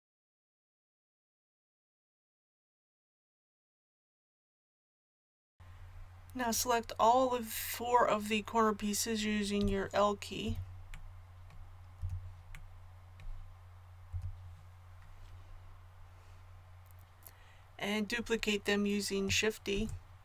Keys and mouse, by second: 0.2 KP_1, 1.0 middle click, 1.3 ctrl+KP_7, 1.5 middle click, 1.9 ctrl+KP_7, 1.9 middle click, 2.3 click, 2.9 l, 3.3 middle click, 3.4 a, 3.5 KP_1, 9.6 l, 10.4 l.